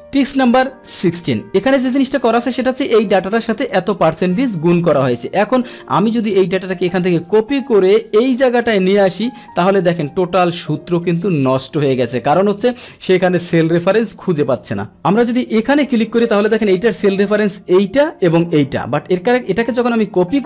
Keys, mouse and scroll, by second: 3.0-4.5 drag, 5.4 click, 7.3 ctrl+c, 8.1 ctrl+c, 8.1 click, 8.7 ctrl+v, 12.8 click, 12.9 click, 14.9 Return, 15.7 click, 15.8 click, 18.6 Return.